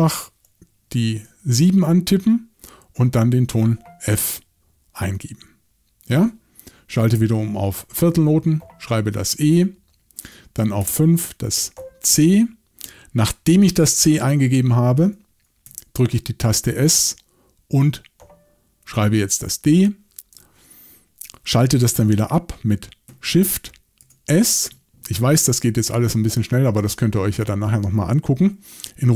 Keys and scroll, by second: 1.2 7, 7.1 6, 10.8 5, 15.7 s, 24.0 shift+s.